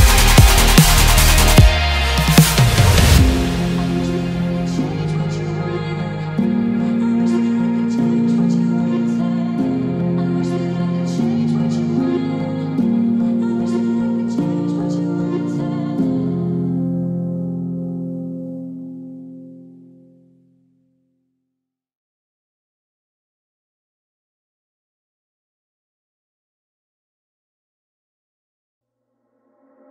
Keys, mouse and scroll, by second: 1.4 click, 1.9-4.1 middle drag, 4.1 alt+m, 4.5 middle click, 5.1-5.4 scroll down 2, 6.6 ctrl+z, 8.2-8.6 scroll up 1, 9.5 click, 9.8-12.1 middle drag, 12.1 scroll up 2, 12.6-13.0 scroll down 1, 13.0-17.0 middle drag, 17.0 click, 18.7 click, 20.3 click, 21.1 click, 22.2-24.1 middle drag, 24.1-24.8 scroll down 2, 24.8-27.7 middle drag, 27.7 click, 28.2-29.9 middle drag.